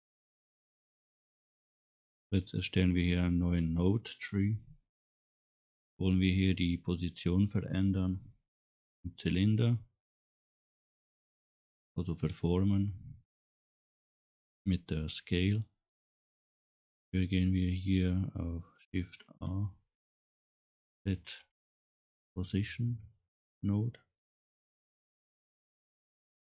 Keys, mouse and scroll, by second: 4.3 click, 19.2 shift+a, 26.1 middle click.